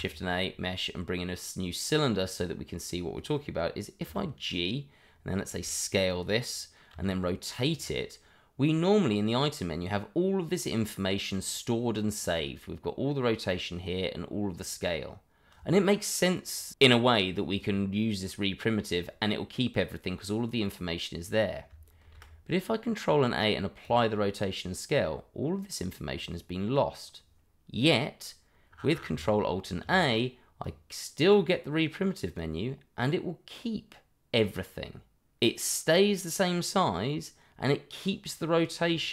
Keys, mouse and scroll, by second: 1.8 click, 4.5 click, 5.4 s, 6.1 click, 6.9 r, 7.8 click, 22.0 ctrl+a, 23.8 click, 29.6 ctrl+alt+a, 30.6 click, 38.8 click.